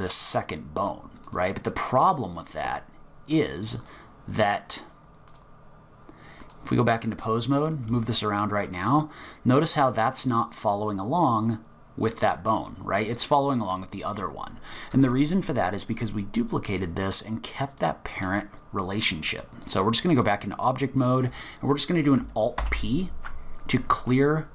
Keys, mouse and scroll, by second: 1.2 click, 3.3 click, 3.8 click, 5.3 click, 6.4 click, 7.7 g, 15.9 click, 16.7 click, 17.7 click, 19.0 click, 20.4 click, 22.6 alt+p.